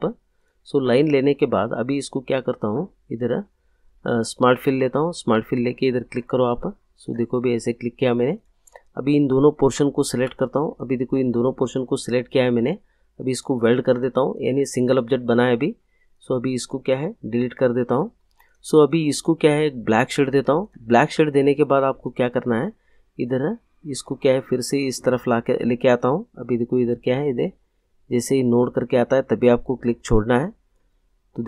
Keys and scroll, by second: 17.4 Delete.